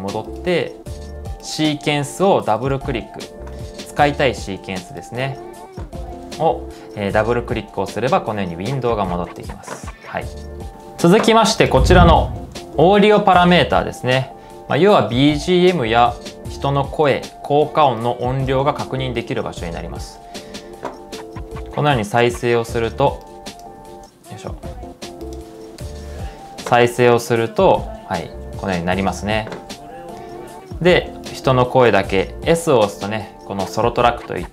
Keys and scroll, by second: 10.4-11.2 typing, 13.1-13.9 typing.